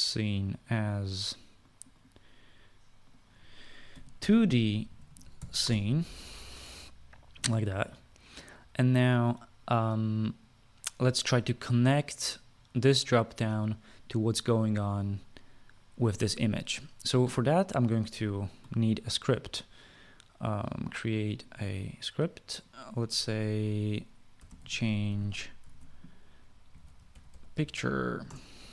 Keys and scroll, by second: 4.4-6.6 typing, 24.8-28.7 typing.